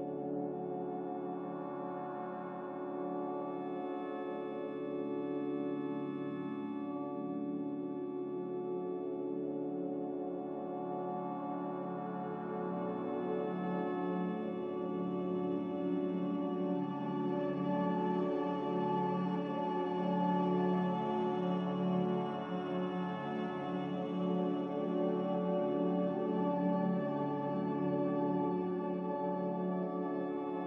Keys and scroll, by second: 5.1 Escape, 5.5 Escape, 15.7 b, 17.1 z, 24.0-25.3 typing.